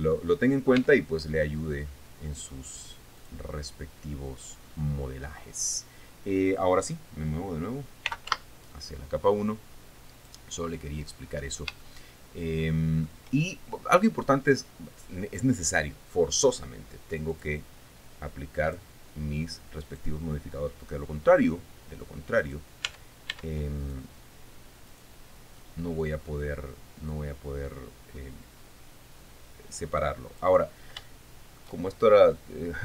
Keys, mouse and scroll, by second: 0.3 scroll down 2, 0.7 middle click, 1.4 Tab, 1.8-2.1 scroll down 1, 2.3 middle click, 3.8 click, 4.7-5.1 scroll down 2, 5.2-5.6 scroll up 2, 5.9-6.5 scroll down 2, 8.4-9.4 typing, 10.7 click, 11.6-12.0 scroll up 2, 12.4-13.8 shift+middle drag, 14.1 shift+scroll down 1, 17.9 click, 19.2 click, 20.5 right click, 23.0 right click, 23.5 Tab, 24.4 right click, 25.5 right click, 27.7-31.1 drag, 31.6 shift+middle click.